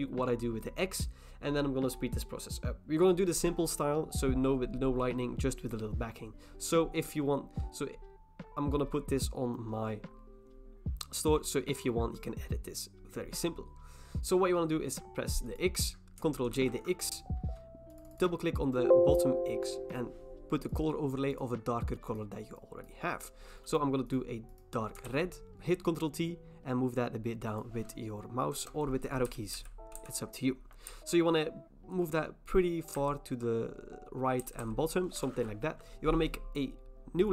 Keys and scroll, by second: 16.6 ctrl+j, 25.1 ctrl+t, 28.6 Return, 29.3 Down, 29.5 Right, 31.4 Right, 31.6 Right, 31.7 Right, 32.0 Right, 32.1 Right, 32.9 Up, 34.4 Down, 34.6 Down.